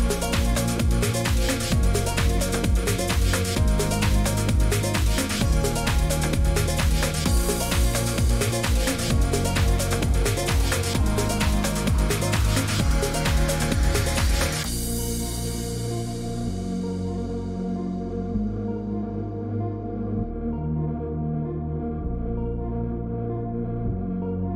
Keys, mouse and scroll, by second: 6.6-8.0 drag, 9.5 click, 10.4 click, 12.8 click, 13.7 click, 14.7 click, 15.0 click, 16.0 click, 17.4 click, 17.8-18.6 scroll, 18.7 click, 19.0 click, 19.0-19.4 scroll down 10, 19.4 click, 19.5 click, 20.5 click, 20.6 click, 21.5 click, 21.5 scroll, 22.9-24.5 typing.